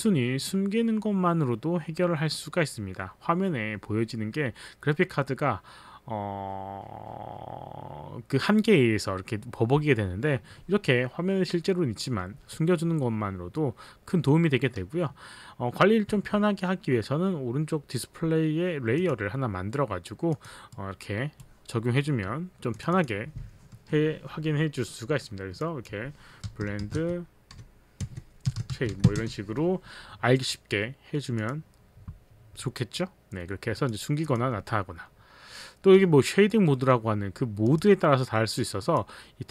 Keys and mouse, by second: 16.0 z, 19.0 click, 20.3 click, 20.7 right click, 22.7 click, 22.9 click, 25.7 click, 26.2-29.7 typing, 31.4 click, 33.8 click, 34.2 click, 34.7 click, 37.7 click, 38.8 click.